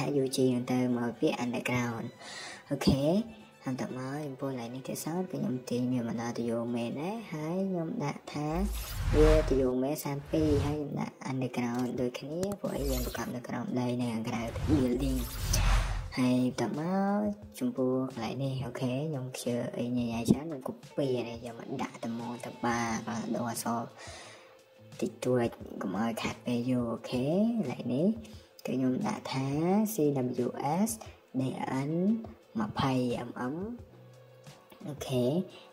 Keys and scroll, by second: 6.1 Escape, 8.0 space, 9.4 typing, 14.3 Escape, 14.5 Escape, 18.6-19.0 typing, 24.8 Escape, 25.6 Escape, 28.3-30.2 typing, 31.5-32.8 typing, 35.1 Escape.